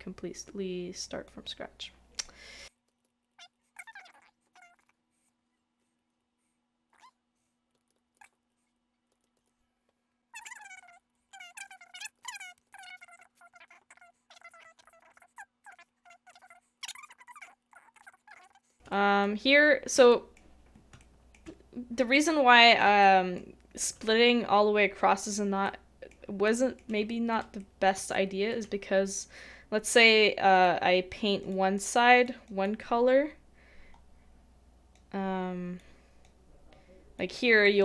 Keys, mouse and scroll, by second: 2.9 shift+click, 6.9 shift+middle click, 7.7 shift+middle click, 7.9 shift+middle click, 9.1 shift+middle click, 9.2 scroll up 1, 9.3 shift+middle click, 9.5-10.0 shift+scroll down 2, 10.6 scroll down 1, 10.8 middle click, 11.6 shift+middle click, 11.7 shift+middle click, 11.9 shift+middle click, 12.2 shift+middle click, 12.3 shift+middle click, 12.8 shift+middle click, 18.1 shift+middle click, 18.4 shift+middle click, 18.5 shift+middle click, 18.7 shift+middle click, 18.9 shift+middle click, 21.0 shift+middle click, 23.0 shift+middle click, 25.6 middle click, 27.1 shift+middle click, 28.1 shift+middle click, 32.4 shift+middle click, 37.6 double click.